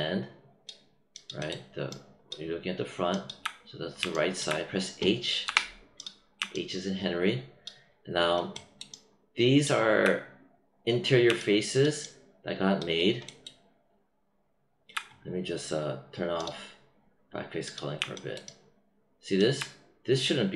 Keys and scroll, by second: 5.4 h.